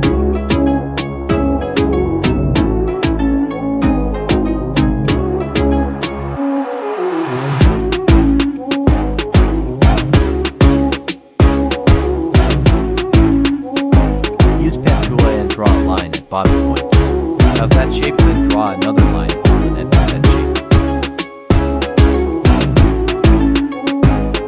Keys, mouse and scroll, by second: 2.3 ctrl+g, 3.2 a, 4.3 click, 7.3 click, 9.8-14.1 drag, 17.9 click, 18.8 shift+click, 19.4 Escape, 22.1 click.